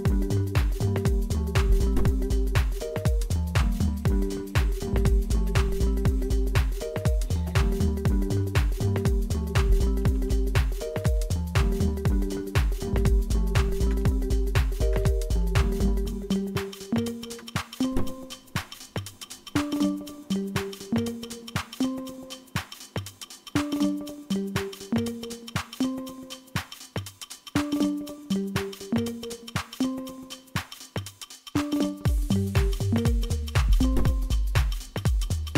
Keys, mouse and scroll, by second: 7.5 Up, 7.9 Up, 8.7 Up, 9.4 Up, 10.1 Down, 11.0 Return, 13.9 Return, 14.9 Return, 17.4 Return.